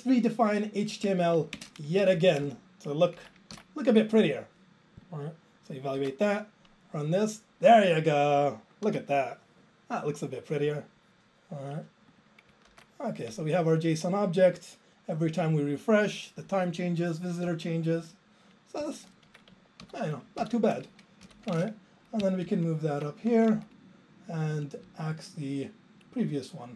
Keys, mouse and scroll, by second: 1.1 Down, 1.6 ctrl+space, 2.1 Down, 2.1 Down, 2.3 Down, 2.4 Down, 4.0 ctrl+j, 18.9 click, 19.3 ctrl+a, 19.9 ctrl+k, 20.4 ctrl+k, 21.1-21.9 typing, 22.4 alt+Up, 22.5 alt+Up, 23.3 ctrl+a, 23.6 Down, 24.8 Up.